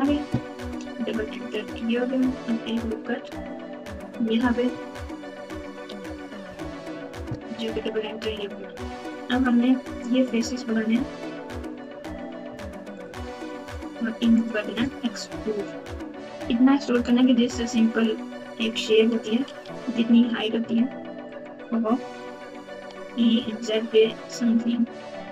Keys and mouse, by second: 5.8 ctrl+r, 9.1 KP_8, 10.7 3, 14.4 shift+click, 15.3 KP_1, 16.1-16.8 KP_Subtract, 17.7-18.4 ctrl+KP_8, 19.6 g, 22.7 e.